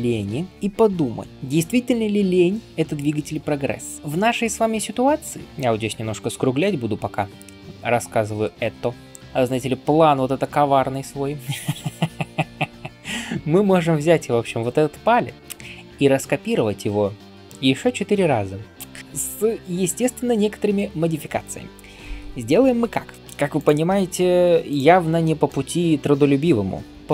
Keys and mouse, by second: 0.5-8.7 drag, 4.0 ctrl+alt+q, 9.2 right click, 10.0-18.1 ctrl+drag, 19.0-23.5 drag, 23.5-24.5 ctrl+middle drag, 24.2 ctrl+s, 24.5 click, 24.6-27.1 shift+middle drag.